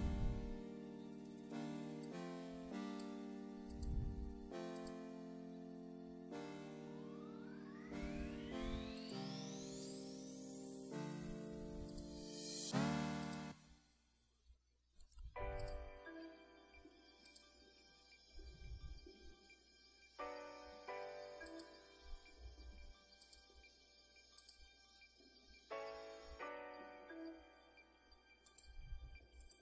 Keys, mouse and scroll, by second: 0.3 click, 1.8 click, 2.4 click, 2.8 click, 3.8 click, 4.5 click, 5.1 click, 5.5 click, 6.3 click, 6.7 click, 7.2 click, 8.1 click, 8.5 click, 9.6 click, 10.1 click, 10.6 click, 11.0 click, 11.3 click, 11.5 click, 12.5 click, 13.3 click, 13.5 click, 14.2 click, 14.5 click, 15.2 click, 15.5 click, 15.9 click, 16.3 click, 17.2 click, 17.7 click, 18.6 click, 18.9 click, 19.3 click, 20.1 click, 20.3 click, 20.7 click, 21.2 click, 21.5 click, 21.9 click, 22.8 click, 25.7 click, 26.4 click, 28.5 click, 28.7 click, 29.5 click.